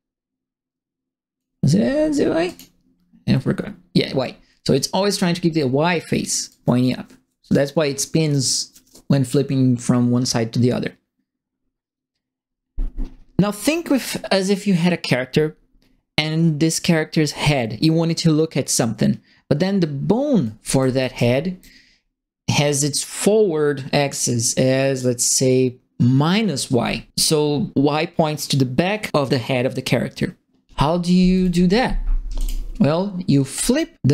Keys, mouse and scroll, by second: 2.4 click, 4.7 click, 6.4-13.9 drag, 20.5-21.6 right drag, 20.5-21.2 typing, 31.4 click, 32.3 click, 33.5 click.